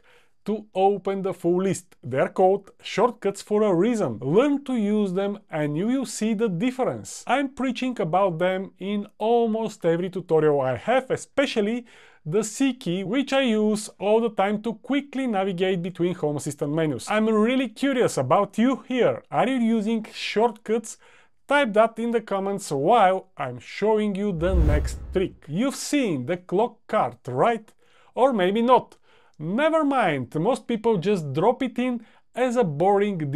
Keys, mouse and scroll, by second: 12.8 c, 15.7 typing.